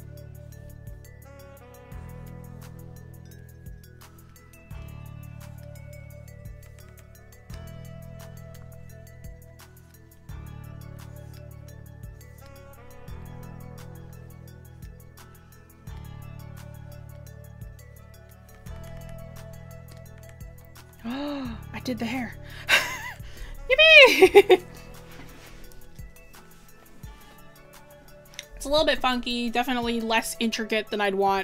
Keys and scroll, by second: 23.3 scroll down 1, 28.9 scroll up 1.